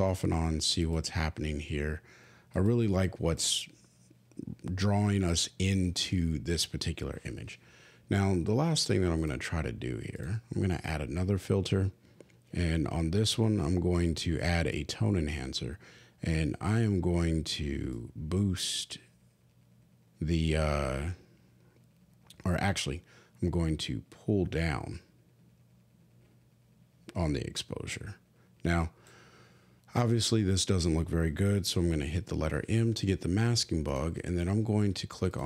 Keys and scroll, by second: 32.4 m.